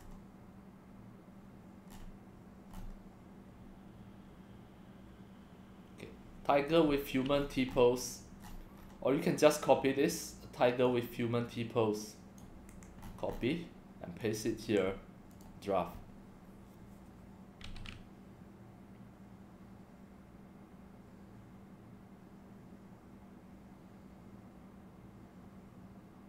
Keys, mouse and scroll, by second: 0.0 scroll down 1, 0.1 scroll up 1, 1.9 scroll down 1, 2.7 scroll up 5, 7.4-7.8 scroll up 11, 8.5-8.9 scroll down 8, 10.9-12.4 drag, 12.7 ctrl+c, 13.0-13.4 scroll up 13, 14.2 click, 14.7 ctrl+v, 15.3 click.